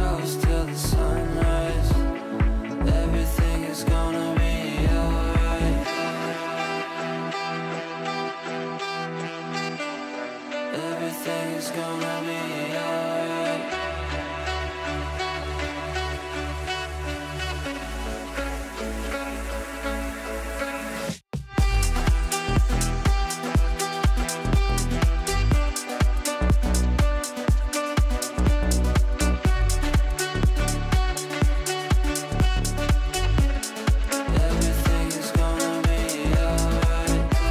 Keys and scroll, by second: 0.3 Escape.